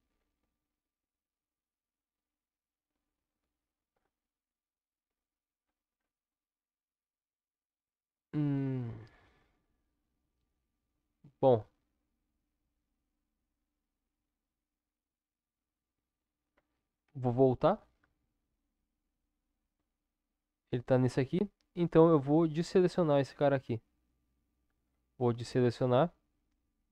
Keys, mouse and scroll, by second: 17.0 ctrl+z, 26.8 click.